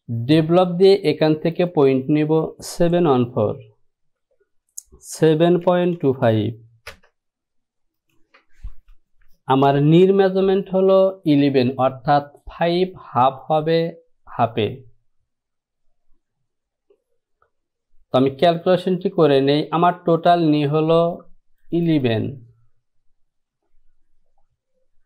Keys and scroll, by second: 4.2 Down, 5.3 KP_7, 5.8 KP_Decimal, 6.1 KP_2, 6.4 KP_5, 7.0 Return.